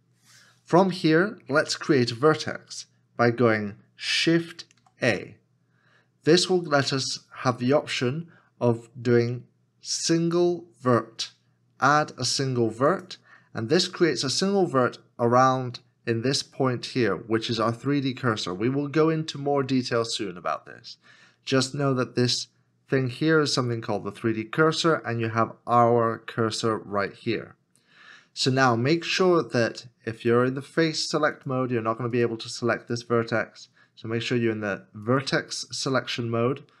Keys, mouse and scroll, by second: 3.6 KP_7, 4.8 shift+a.